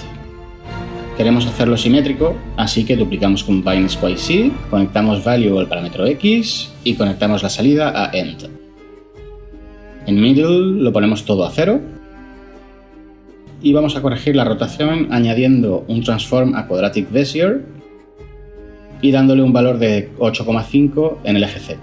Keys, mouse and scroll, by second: 3.5 shift+d, 11.1 0, 11.4 Return, 17.5 ctrl+shift+a, 18.1 typing, 21.4-21.8 typing.